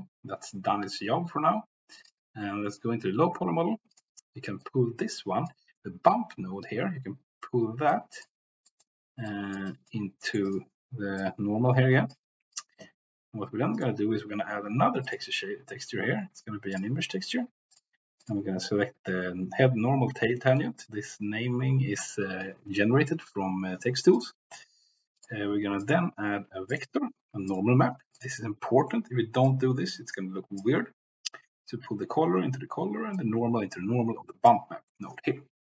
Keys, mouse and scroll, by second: 2.1 drag, 2.7 click, 3.9 click, 4.6-5.5 drag, 7.9 click, 8.6 click, 9.2 click, 9.7 click, 10.3 middle click, 10.5 click, 11.3-12.2 drag, 13.7-17.8 drag, 18.3-24.2 drag, 25.1 drag, 25.9-28.2 drag, 29.5-30.7 drag, 33.1-34.6 drag.